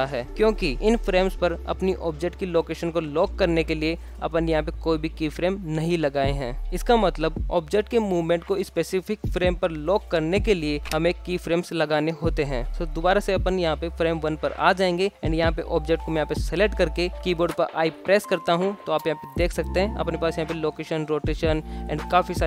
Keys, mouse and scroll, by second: 0.7 shift+Left, 2.8 ctrl+z, 3.2 ctrl+z, 3.9 ctrl+z, 4.5 shift+scroll up 1, 4.6-5.2 shift+middle drag, 8.2-9.3 middle drag, 12.7 middle click, 15.3 click, 16.7 i.